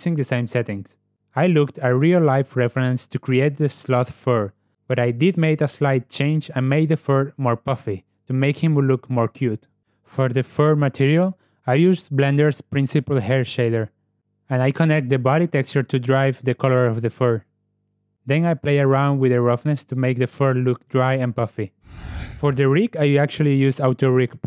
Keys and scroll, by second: 9.8 ., 10.9 g, 13.3 g, 21.9 alt+F8, 23.7 Tab.